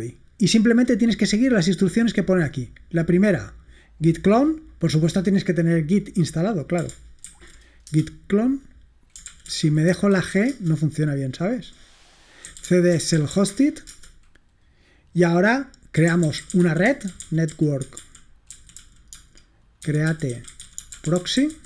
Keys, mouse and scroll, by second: 3.9 click, 4.8 right click, 5.5 click, 6.1 click, 7.3 ctrl+alt+v, 7.9 Return, 9.4 ctrl+p, 9.5 ctrl+a, 9.9 g, 10.5 Return, 12.3-14.1 typing, 13.9 Return, 15.8-21.6 typing.